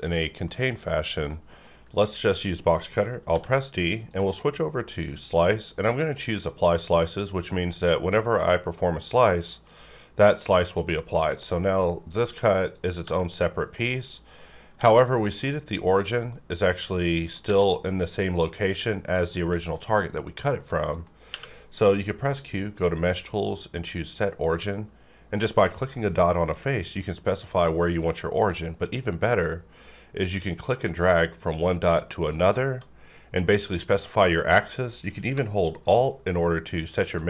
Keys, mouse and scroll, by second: 3.3 d, 4.1 click, 6.3-10.8 drag, 12.9 g, 13.8 right click, 14.8 r, 16.0 right click, 16.3 middle click, 17.4 r, 19.2 right click, 19.7-20.8 scroll down 1, 20.8 middle click, 21.3 q, 23.7 q, 23.8 click, 30.7-37.2 drag.